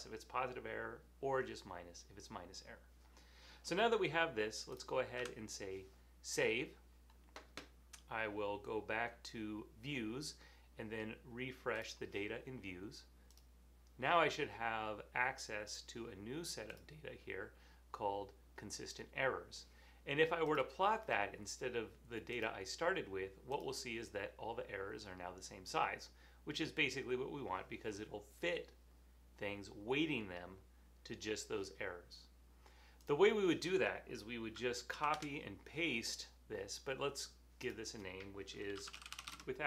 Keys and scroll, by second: 5.3 super+s, 35.0 super+c, 35.2 super+v, 38.6-39.6 typing.